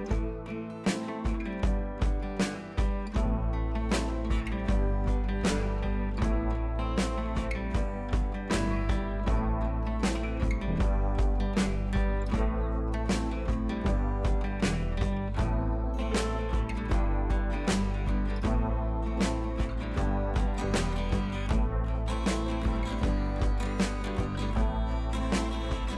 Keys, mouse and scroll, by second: 0.4 click, 2.2-6.8 drag, 8.2-11.7 drag, 12.8-13.2 drag, 22.7-23.0 click, 24.4 click.